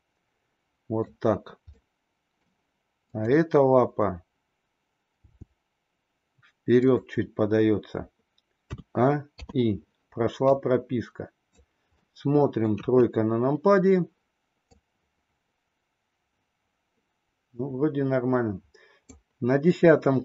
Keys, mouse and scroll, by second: 1.7-2.5 middle drag, 3.1 click, 5.1 g, 8.6 a, 9.4 i, 10.5-11.6 drag, 11.9-12.7 middle drag, 12.7 KP_3, 14.8-19.1 drag.